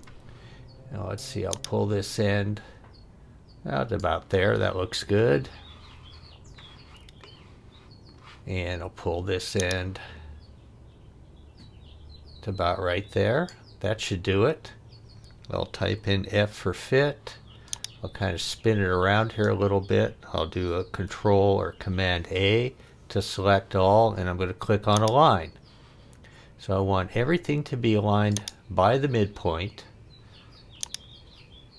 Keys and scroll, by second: 15.9 f, 20.8 super+a.